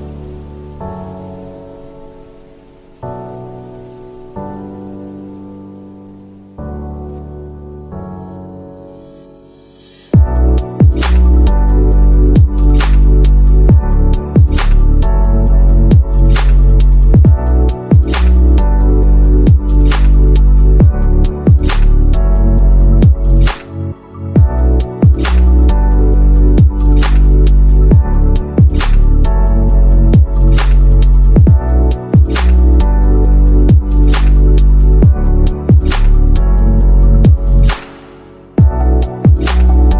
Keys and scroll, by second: 0.6-1.9 typing, 3.9 shift+F2, 4.2 F3, 5.1 ctrl+k, 5.5 F3, 14.1 shift+F2, 14.5 Escape, 20.9 shift+Home, 21.1 shift+Up, 22.4 o, 22.7 BackSpace, 22.9 Caps_Lock, 23.7 Caps_Lock, 24.1-27.6 typing, 28.4 Return, 29.2-34.0 typing, 35.8-38.0 typing, 39.2 shift+c.